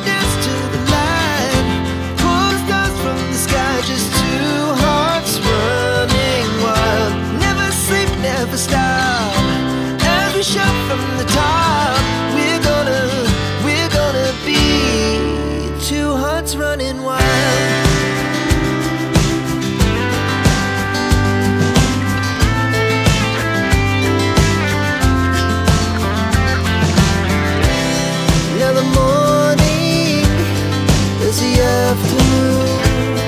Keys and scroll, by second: 1.9 o, 3.8-6.7 typing, 6.4 KP_Divide, 6.9 Return, 10.5-11.1 typing, 13.0 Escape, 31.3 KP_3, 31.5 KP_0, 31.6 Return.